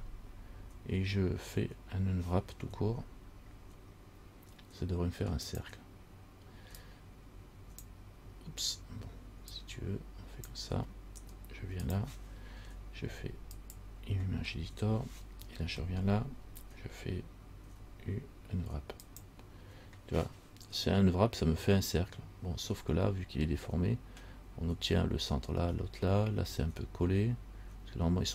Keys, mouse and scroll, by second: 5.6 click, 7.0 click, 9.7 click, 12.0 click, 17.8 u, 22.8-26.4 scroll up 4, 26.4 scroll up 1.